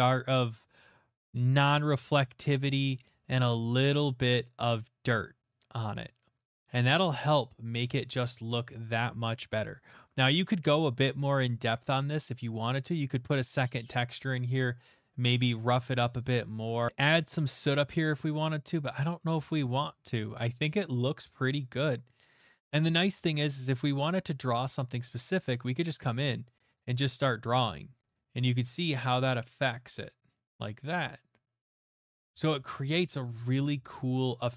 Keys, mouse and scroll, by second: 2.8 middle click, 7.2 middle click, 7.3-7.7 middle click, 7.3 middle click, 8.0 middle click, 8.3 middle click, 8.3 middle click, 8.3 middle click, 8.3 middle click, 9.3 middle click, 9.6 middle click, 9.7 middle click, 11.8 middle click, 12.8 middle click, 13.9 middle click, 16.5 middle click, 16.8 shift+middle click, 16.9 click, 16.9 middle click, 16.9 x, 18.1 middle click, 18.4 click, 19.2 middle click, 19.3 ctrl+z, 20.3 middle click, 22.4 middle click, 24.9 click, 25.7 middle click, 26.1 click, 26.4 click, 26.9 click, 27.2 click, 27.4 click, 27.7 click, 27.9 click, 28.1 click, 32.1 middle click, 32.2 ctrl+z, 32.6 ctrl+z, 32.9 ctrl+z, 33.3 ctrl+z.